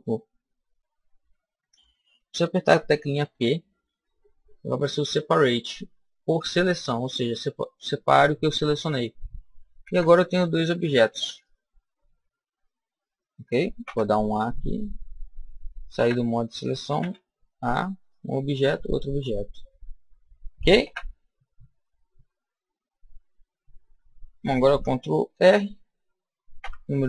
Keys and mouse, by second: 3.2 p, 7.9-11.2 middle drag, 9.7 Tab, 10.8 Tab, 11.7 Tab, 11.7-13.0 right drag, 12.3 Tab, 13.7 a, 14.3 a, 15.8 Tab, 16.9 a, 17.9-20.4 right drag, 20.7 Tab, 21.1-23.6 middle drag, 25.2 ctrl+r.